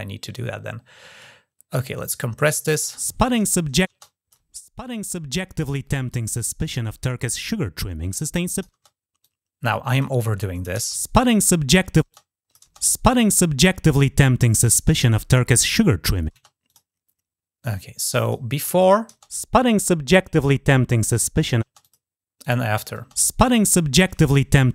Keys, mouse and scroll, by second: 1.7-2.3 drag, 3.8-4.1 drag, 4.8 click, 7.2-8.4 drag, 9.0-9.8 drag, 11.9-12.4 drag, 16.5 click, 18.0 click, 18.6 click, 21.6 click, 22.2 click.